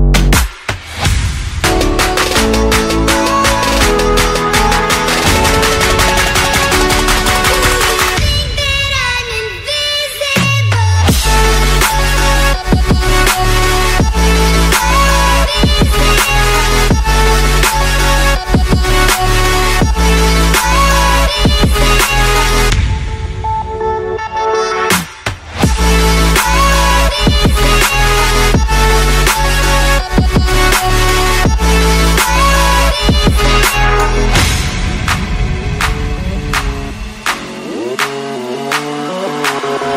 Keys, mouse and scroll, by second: 1.1 click, 2.0 click, 3.0 click, 3.9 click, 5.0 click, 5.7 click, 7.3 click, 7.9 8, 8.1 Return, 10.3 shift+click, 11.2 click, 15.3 click, 16.1 click, 16.9 z, 17.3 middle click, 17.6 middle click, 20.0 click, 20.6 click, 20.7 F9, 22.0 click, 22.3 click, 22.4 click, 22.9 click, 23.3 click, 23.3 4, 23.4 Return, 23.8 click, 24.2 5, 24.3 Return, 24.5 click, 24.6 F9, 35.2 click, 35.4 middle click, 35.5 scroll, 38.4 scroll.